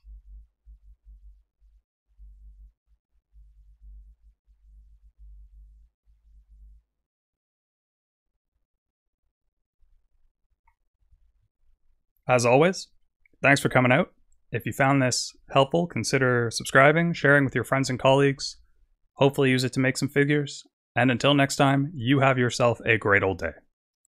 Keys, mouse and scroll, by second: 12.2 click, 12.6 click.